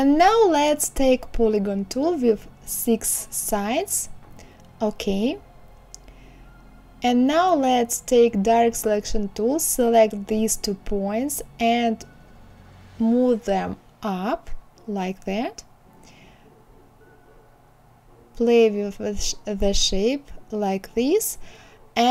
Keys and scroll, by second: 2.4 KP_6.